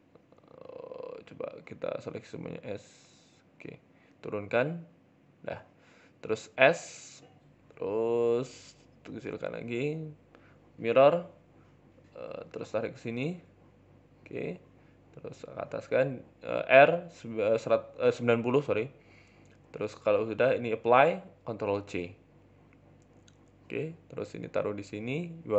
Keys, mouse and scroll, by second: 1.4 ctrl+z, 1.5 ctrl+z, 1.7 ctrl+z, 1.9 ctrl+z, 2.2 s, 3.2 shift+middle click, 3.6 g, 5.2 scroll down 5, 5.2 Tab, 5.3 middle click, 6.2 s, 7.1-8.4 scroll up 7, 7.6 KP_1, 8.1 shift+middle click, 8.4 s, 9.4 click, 11.1-11.6 scroll up 3, 11.4 Tab, 11.6 shift+middle click, 11.8 a, 12.2 g, 14.4 Tab, 14.4 scroll down 4, 14.6 middle click, 15.1 KP_7, 15.7 r, 16.8 middle click, 17.4 g, 18.7 middle click, 18.9 middle click, 19.4 middle click, 20.1 click, 20.5 shift+right click, 21.0 ctrl+j, 21.2-21.8 scroll down 5, 21.4 middle click, 21.8 KP_7, 22.2-22.9 scroll down 4, 22.4 shift+middle click, 22.9 g, 24.1 scroll up 6, 24.4 shift+middle click, 24.6 z.